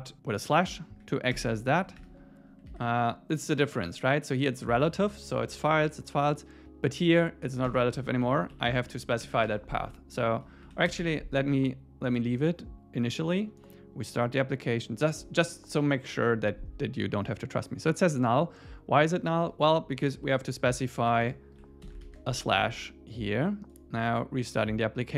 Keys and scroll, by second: 2.7 super+s, 7.7 super+s, 8.0 Left, 8.2 Right, 8.4 Left, 8.5 Right, 9.0 Left, 9.4 super+s, 10.7 Right, 12.0 super+s, 20.0 Left, 23.0 super+s.